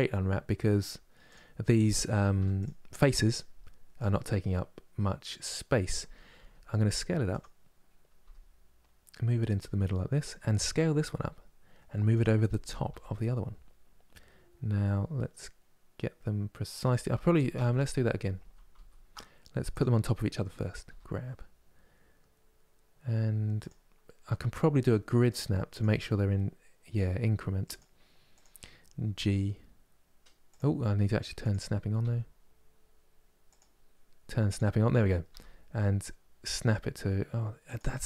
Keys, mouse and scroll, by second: 1.0 click, 6.1 s, 7.9 g, 9.9 click, 10.9 s, 12.6 g, 17.2 ctrl+z, 17.4 ctrl+z, 17.7 ctrl+z, 18.1 ctrl+z, 18.4 ctrl+z, 19.4 click, 20.5 g, 28.1 click, 28.8 g, 34.1 click, 35.0 g.